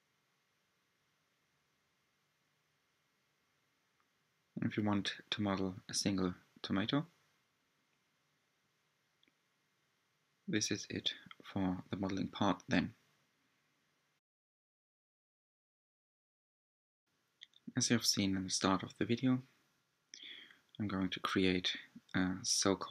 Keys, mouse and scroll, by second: 2.2-4.9 middle drag, 4.9-6.1 drag, 8.9 click, 11.7-12.2 scroll down 1, 12.2-13.3 scroll up 1, 13.3-13.9 scroll up 2, 13.9-17.5 middle drag, 17.5 click, 18.7-20.1 drag, 20.4-22.0 scroll down 10, 22.0-22.9 middle drag.